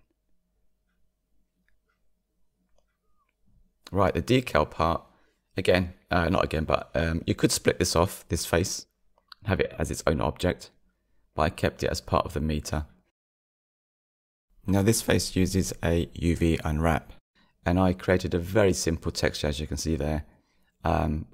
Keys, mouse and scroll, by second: 0.8-1.4 scroll down 3, 1.4 middle click, 2.6 click, 3.2 Tab, 5.1 3, 6.3-7.6 drag, 8.0 middle click, 10.4-11.7 middle drag, 11.9-13.6 drag, 14.9-15.2 scroll down 2.